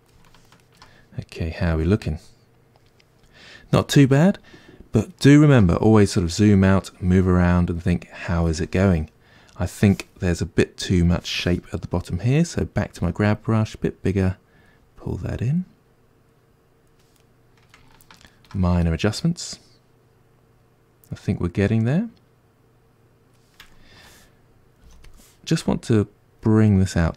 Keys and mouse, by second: 11.1-13.0 drag, 13.0 f, 14.1-17.2 drag, 17.2-25.6 middle drag, 24.9 f, 25.6-27.1 drag.